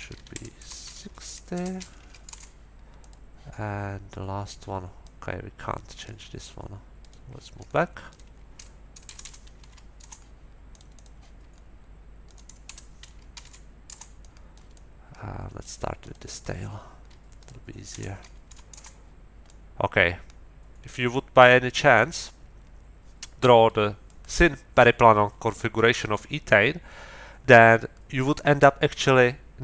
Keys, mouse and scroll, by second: 0.0 Right, 0.3 BackSpace, 1.0 KP_5, 1.5 BackSpace, 2.0 KP_6, 2.3 Return, 3.0 scroll up 2, 3.0 click, 5.0-6.2 drag, 7.0 middle click, 8.1 middle click, 9.0 BackSpace, 9.5 KP_2, 9.6 KP_4, 10.0 Return, 10.7 click, 12.2 click, 12.6 BackSpace, 13.3 KP_1, 13.4 KP_2, 13.9 Return, 14.2-15.8 drag, 16.0 middle click, 17.4 middle click, 17.9 BackSpace, 18.4 KP_2, 18.7 Return, 19.4-23.8 middle drag, 24.0-26.3 drag, 28.2-29.6 drag.